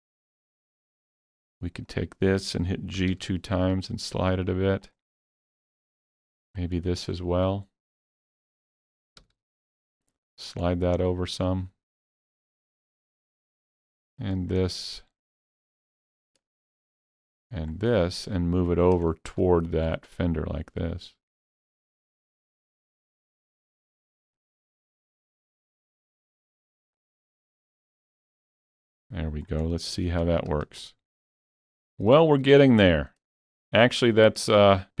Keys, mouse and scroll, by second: 1.8-4.9 alt+drag, 3.0 g, 3.1 g, 6.6-8.4 middle drag, 7.9 ctrl+click, 8.4 ctrl+middle click, 9.2 g, 9.3 g, 10.7 middle click, 11.3 g, 11.6-12.9 scroll up 3, 12.9-14.8 middle drag, 14.2 click, 14.8 middle click, 15.5 click, 16.1 middle click, 16.7-18.2 shift+middle drag, 18.2-23.1 shift+middle drag, 20.2-22.1 drag, 23.4-23.8 scroll down 3, 23.8 middle click, 25.6 ctrl+click, 26.1-30.0 ctrl+middle drag, 27.3 ctrl+middle click, 28.6 click, 29.7 scroll down 1, 30.0 alt+a, 30.2 Tab, 30.6 alt+a, 30.7-31.2 alt+scroll down 4, 31.2 middle click, 32.2-33.3 shift+middle drag, 33.4 shift+middle click, 33.4 scroll, 33.7 scroll down 1.